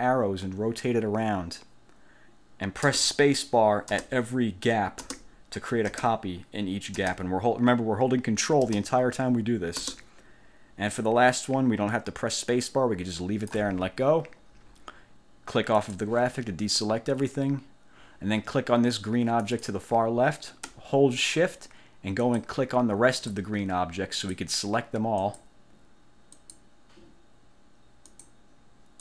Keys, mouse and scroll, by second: 3.0 ctrl+space, 4.0 ctrl+space, 5.1 ctrl+space, 6.0 ctrl+space, 7.1 ctrl+space, 8.8 ctrl+space, 9.9 ctrl+space, 15.9 click, 19.6 click, 22.4 shift+click, 23.3 shift+click, 24.3 shift+click, 25.3 shift+click, 26.5 shift+click, 28.2 shift+click.